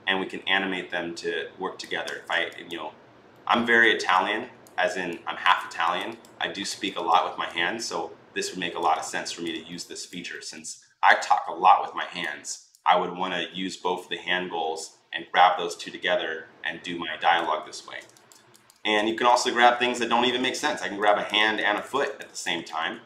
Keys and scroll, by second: 1.9 ctrl+z, 17.6 ctrl+z, 19.4 ctrl+z, 19.7 ctrl+z.